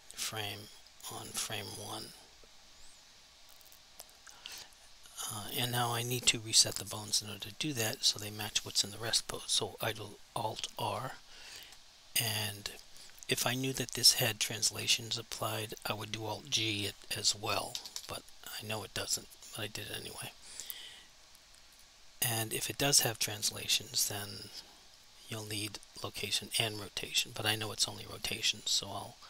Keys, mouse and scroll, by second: 10.8 alt+r, 17.3 alt+g, 21.8 click, 28.1 click.